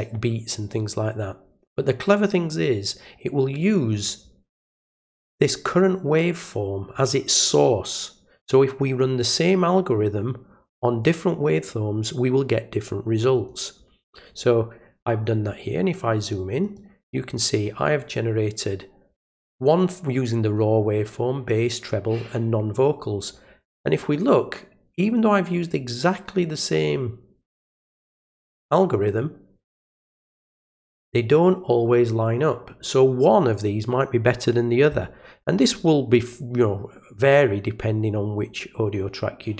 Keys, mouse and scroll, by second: 3.9 click, 4.9 click, 5.7-6.9 drag, 11.0 right click, 13.3 click, 16.2 click, 16.6 click, 28.2 click.